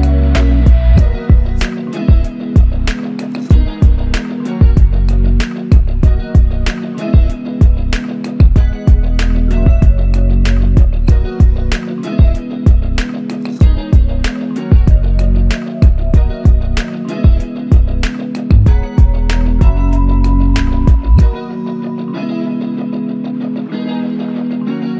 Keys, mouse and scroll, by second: 2.3 ctrl+click, 3.3 ctrl+click, 5.2 alt+click, 6.3 alt+click, 12.4 ctrl+click, 19.1 ctrl+click, 21.1 ctrl+click.